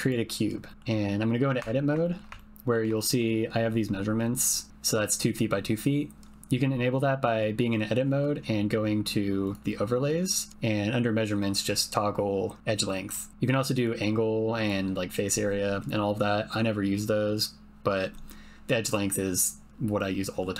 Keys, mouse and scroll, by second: 0.7 ctrl+click, 1.6 Tab, 2.0 shift+click, 2.4 ctrl+click, 2.9 shift+click, 9.4-19.8 drag, 20.0 click.